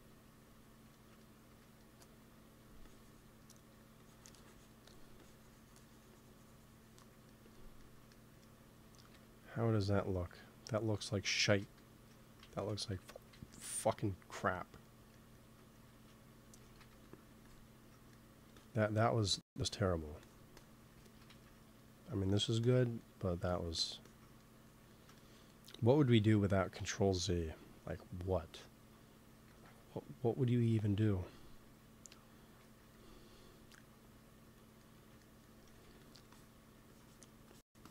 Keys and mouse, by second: 0.8 middle click, 1.4 f, 2.1 f, 2.7-3.7 drag, 3.6 f, 9.0 KP_1, 9.6 KP_3, 11.5 ctrl+z, 12.4 ctrl+z, 12.9 KP_1, 13.3 ctrl+z, 13.6 ctrl+z, 14.8 middle click, 15.9 ctrl+z, 16.6 shift+c, 16.8 f, 17.0-18.0 drag, 20.1-21.3 drag, 21.3 ctrl+z, 21.7-25.8 drag, 26.1 KP_1, 26.7 KP_3, 29.4 ctrl+s, 32.5 ctrl+s, 35.6 x, 35.8 f, 36.3-37.9 drag.